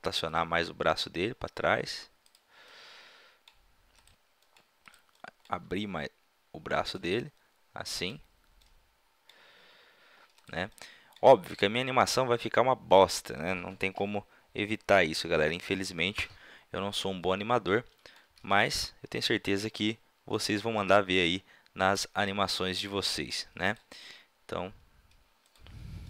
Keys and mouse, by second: 0.9 r, 2.7-4.3 middle drag, 5.7 r, 6.6 middle click, 7.2-8.8 middle drag, 10.4-10.7 drag, 18.5-20.3 drag, 19.6 r, 20.4-22.4 drag, 20.8-22.0 right drag, 20.9 g, 22.2 right click, 22.6-23.1 drag, 23.7-24.1 drag, 24.1-25.2 right drag, 24.1 r.